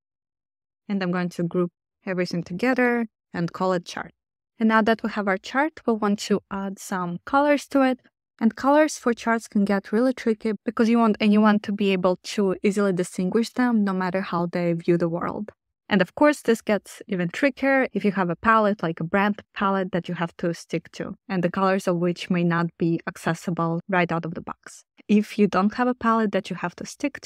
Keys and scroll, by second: 0.9 super+g, 2.4 super+r, 2.4-3.8 typing, 4.1 Return.